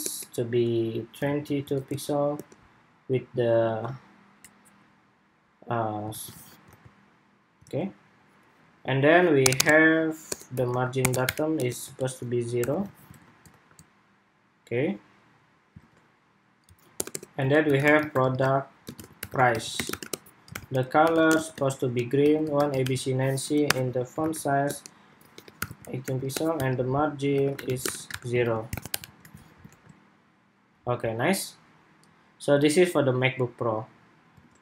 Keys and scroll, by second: 5.8 super+s, 6.1 super+Tab, 6.4 super+r, 7.3 super+Tab, 12.7 super+s, 12.9 super+Tab, 13.2 super+r, 15.5 super+Tab, 28.3 super+s, 28.9 super+s, 29.1 super+Tab, 29.4 super+r, 34.1 super+Tab.